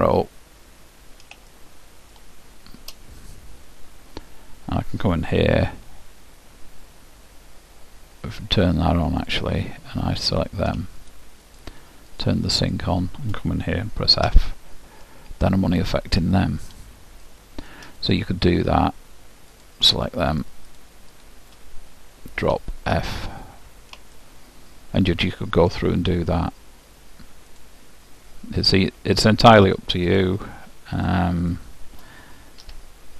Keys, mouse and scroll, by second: 0.7-3.9 middle drag, 9.4-14.7 drag, 14.5 f, 15.7-19.9 middle drag, 19.7-23.3 drag, 22.6 f, 23.4-26.2 middle drag, 27.7-29.5 drag, 28.2 middle click, 29.5 middle click, 29.9-33.1 drag, 32.7 f.